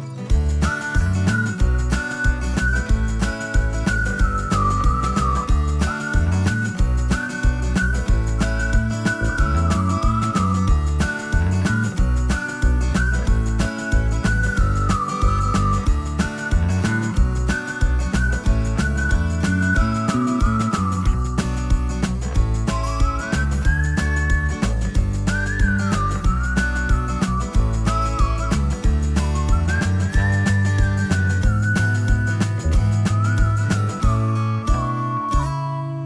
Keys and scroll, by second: 5.0-6.7 typing, 9.5 space, 12.3 ctrl+g, 12.9 b, 16.1 space, 21.1 m, 23.9 Right, 33.4 shift+space, 34.6 space.